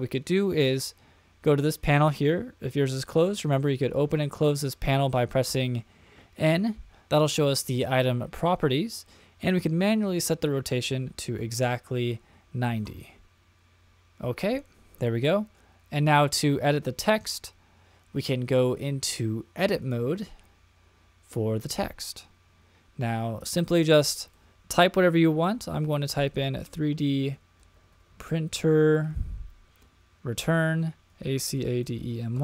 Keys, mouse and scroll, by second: 3.1 n, 3.9 n, 4.8 n, 5.5 n, 9.5-14.1 drag, 15.0-15.6 middle drag, 19.8-21.7 drag, 23.8 BackSpace, 24.0 BackSpace, 24.2 BackSpace, 24.4 BackSpace, 25.6-28.5 typing, 29.7 Return, 31.1-32.4 typing.